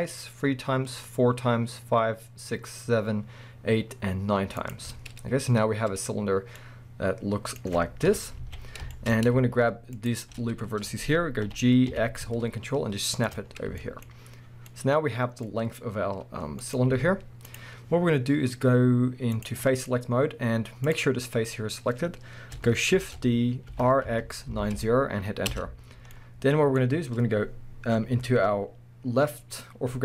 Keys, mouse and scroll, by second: 4.7 ctrl+click, 5.2-6.0 scroll down 2, 6.5-9.9 middle drag, 8.1 KP_1, 8.4 alt+a, 8.6-9.9 scroll up 2, 9.9 alt+shift+click, 10.5 scroll up 1, 11.5 g, 13.3 click, 13.5 scroll down 1, 13.8-19.4 shift+middle drag, 14.4 scroll down 1, 15.4-16.6 scroll up 2, 16.9 z, 19.4 click, 19.6 scroll up 1, 19.6-20.8 middle drag, 20.3 scroll up 1, 20.8 click, 22.9 shift+d, 25.6 Return, 26.1-30.0 middle drag, 26.8-30.0 scroll up 2.